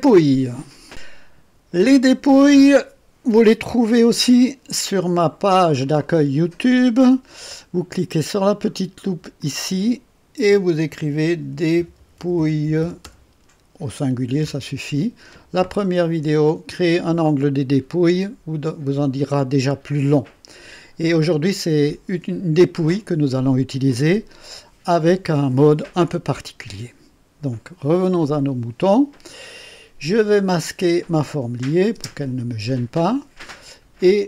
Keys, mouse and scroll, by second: 4.0 click, 7.0 scroll down 2, 9.3 click, 10.9-13.5 typing, 14.4 Return, 15.7-16.0 scroll down 2, 28.1 click, 31.1 click, 31.9 space.